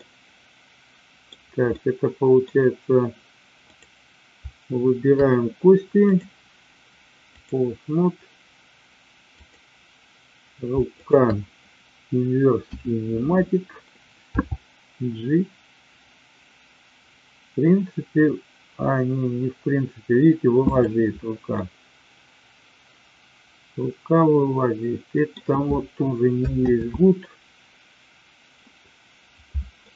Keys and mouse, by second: 1.6-2.4 middle drag, 3.6 click, 6.0-7.5 drag, 9.2-10.2 drag, 10.9 shift+click, 12.6 KP_1, 14.4 g, 20.8 click, 21.5-25.4 middle drag, 26.8 ctrl+z, 29.8-29.9 middle drag.